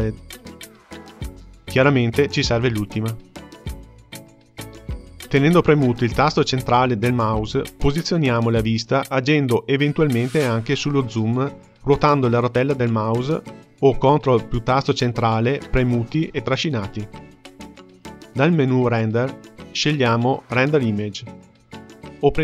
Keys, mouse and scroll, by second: 0.8 click, 4.7-12.3 middle drag, 12.3-15.3 scroll down 1, 20.1-22.4 drag.